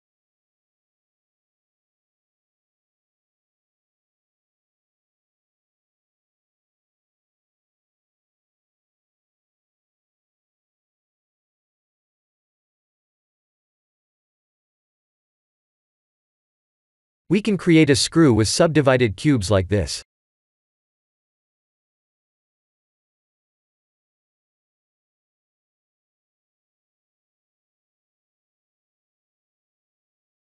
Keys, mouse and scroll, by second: 0.3 1, 0.7 click, 1.1 b, 2.6 g, 5.2 click, 5.6 b, 7.0 g, 9.1 Tab, 9.6-10.0 scroll up 4, 10.0-10.6 middle click, 10.1 middle click, 10.2 middle click, 11.5 middle click, 11.6 shift+z, 12.6 click, 13.0-13.7 scroll down 10, 15.2 click, 15.7-16.5 scroll up 1, 16.5-17.2 scroll down 1, 17.9 scroll down 1, 18.0 shift+a, 20.8 s, 22.0 ctrl+3, 22.3-23.2 scroll up 10, 23.9 s, 26.3 KP_3, 27.2 shift+z, 27.6-28.1 scroll up 4, 28.1 g.